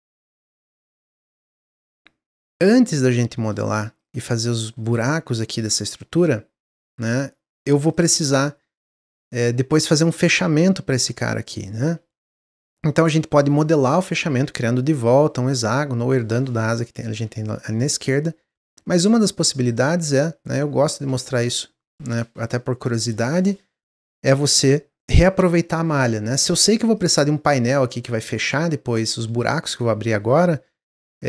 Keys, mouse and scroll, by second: 0.5-2.9 middle drag, 2.9 click, 3.4 shift+click, 4.0 shift+click, 5.4 shift+click, 6.6 click, 7.0 middle click, 7.8 click, 11.0 click, 19.1 shift+click, 19.6 shift+click, 20.0 shift+click, 20.4 shift+click, 20.9 shift+click, 24.5-26.9 middle drag, 26.9 click, 27.9 ctrl+z, 28.1-31.2 middle drag.